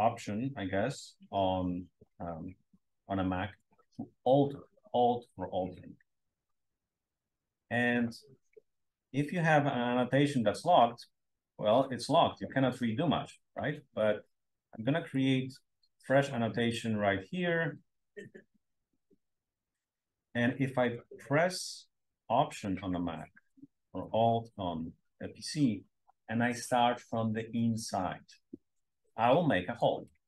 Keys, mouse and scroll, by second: 11.9 click, 14.1-14.6 scroll down 2, 14.6 scroll up 1, 15.1-19.0 drag, 17.6-23.6 scroll up 1, 23.6-24.3 alt+scroll up 1, 24.3-25.2 alt+scroll up 1, 25.2-26.8 alt+scroll up 1, 28.6-30.0 alt+drag.